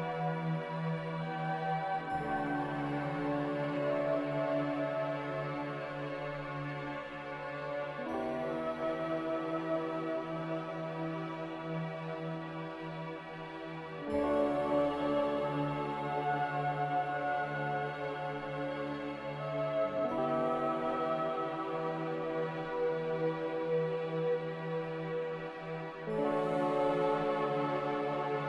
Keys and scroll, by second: 1.3 z, 4.0 1, 4.0 5, 4.4 Return, 7.0 typing, 12.7 typing, 15.3-16.6 typing, 22.1 Return, 22.1 1, 22.1 0, 28.2 n.